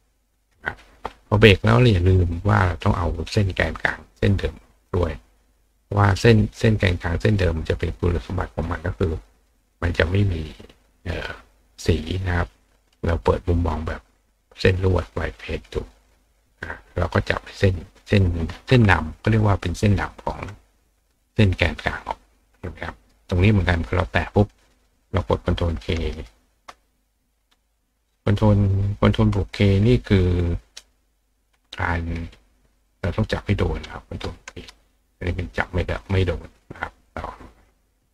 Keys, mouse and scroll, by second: 0.4 click, 1.7 click, 2.3 click, 3.8 click, 4.8 click, 6.0 click, 8.5 click, 9.6 click, 10.7 click, 12.7 click, 14.7 click, 16.2 click, 16.9 click, 21.1 click, 23.7 click, 32.0 click, 32.8 click, 34.8 click, 36.0 click.